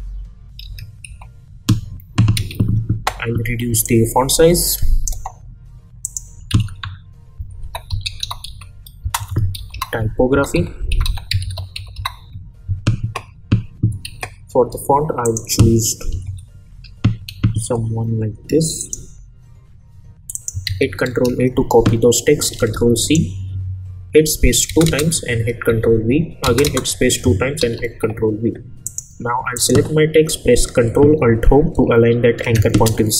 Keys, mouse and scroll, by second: 0.6 shift+e, 1.0 shift+t, 2.3 ctrl+a, 3.8-5.1 drag, 6.5 ctrl+a, 7.1-12.4 typing, 14.0 ctrl+a, 15.2 click, 15.9-17.2 typing, 18.8 click, 20.6 ctrl+a, 22.8 ctrl+c, 23.0 click, 24.7 space, 25.7 ctrl+v, 26.4 space, 27.6 ctrl+v, 28.8 click, 32.3 ctrl+alt+Home.